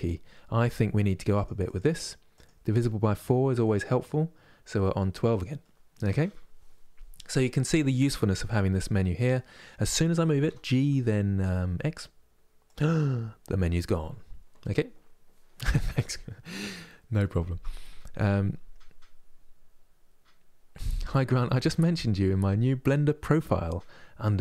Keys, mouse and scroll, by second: 1.0-2.8 drag, 3.1-6.2 middle drag, 9.0-10.2 middle drag, 10.2 g.